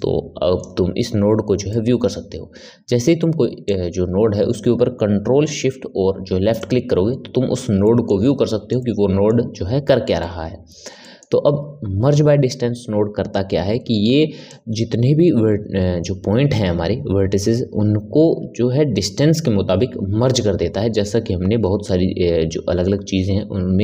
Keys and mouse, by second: 1.6-3.6 middle drag, 3.6 click, 6.5 click, 7.7-14.0 middle drag, 14.4-17.5 drag.